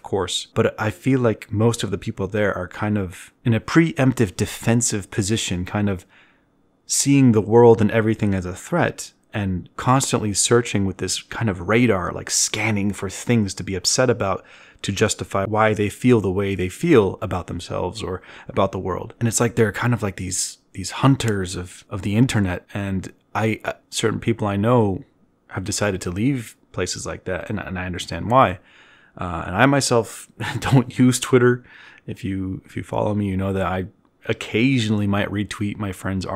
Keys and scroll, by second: 8.4 z, 22.0 ctrl+z, 25.2 f, 36.0 v.